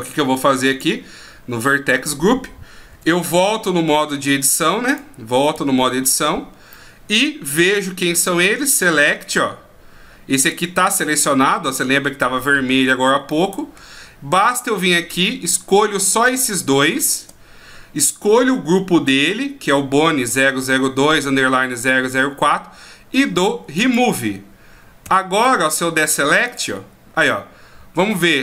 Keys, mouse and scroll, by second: 0.7 click, 2.9 Tab, 4.9 right click, 5.5 a, 6.7 middle click, 8.1 click, 13.3 middle click, 15.0 a, 16.1 right click, 17.0 shift+right click, 23.8 click, 25.0 a, 26.5 click.